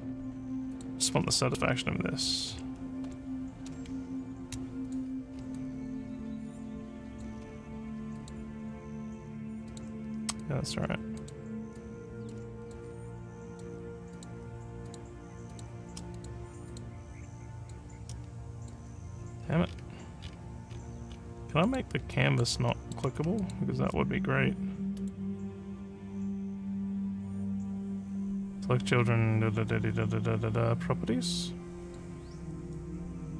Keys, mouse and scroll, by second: 0.7 click, 1.7 2, 3.1 5, 4.9 click, 5.6-7.2 alt+drag, 8.2 click, 9.7 click, 10.4 alt+click, 11.2 click, 11.8 alt+click, 12.6 click, 13.5 click, 14.2 shift+click, 14.9 shift+click, 15.5 shift+click, 16.1 click, 16.7 click, 17.7 shift+click, 18.5 alt+click, 19.7 alt+scroll up 1, 20.3-21.3 alt+scroll up 11, 21.7 click, 22.2 alt+click, 22.7 alt+middle click, 23.4 shift+click, 25.0 right click, 31.9 click.